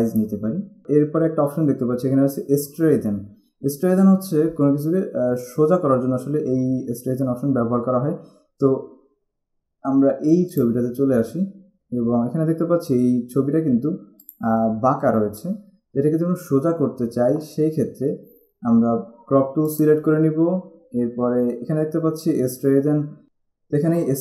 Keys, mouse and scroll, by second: 0.6 scroll up 1, 10.7 click, 14.4 click, 19.8 click.